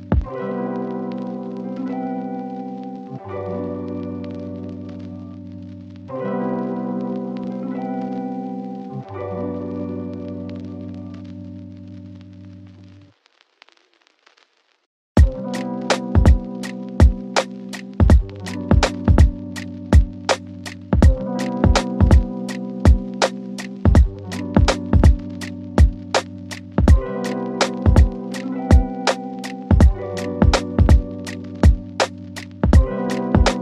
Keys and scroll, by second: 13.6 shift+Page_Up.